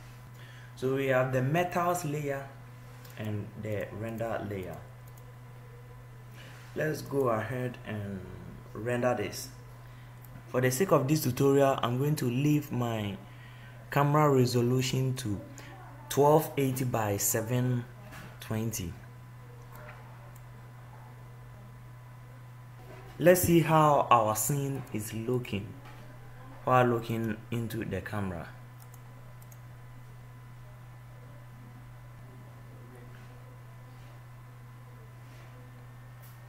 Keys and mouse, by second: 3.9-9.0 drag.